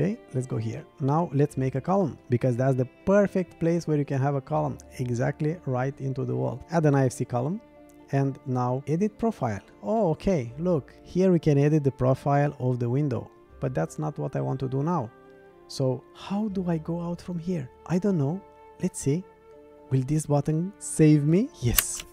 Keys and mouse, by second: 0.1 shift+click, 1.2 drag, 10.0-12.2 middle drag, 12.3 middle click.